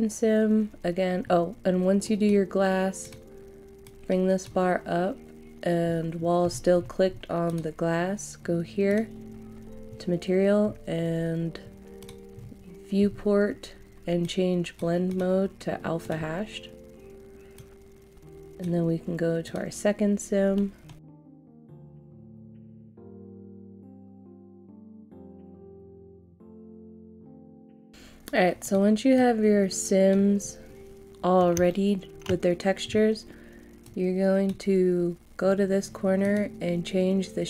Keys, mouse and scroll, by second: 6.1 scroll down 1, 7.4 click, 10.2 scroll down 1, 12.0 click, 12.3-14.2 scroll down 1, 14.2-18.6 drag, 20.5 middle click, 21.0 click, 21.4 middle click, 21.5 shift+a, 21.7 click, 22.2 middle click, 22.3 click, 22.4 shift+a, 22.6-24.2 drag, 24.7 middle click, 24.8 click, 24.9 scroll down 1, 24.9 middle click, 25.1 click, 25.8 shift+a, 26.0 click, 26.8 shift+a, 27.0 click, 27.4 scroll down 1, 27.6 scroll up 1, 27.6 click, 30.7 scroll up 1, 31.6 shift+middle click, 33.8-37.4 drag.